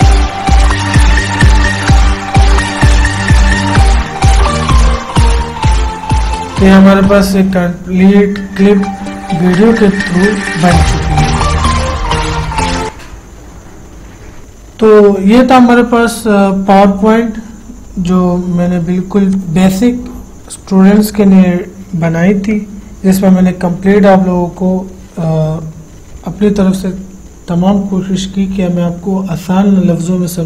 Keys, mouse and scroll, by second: 13.0 click.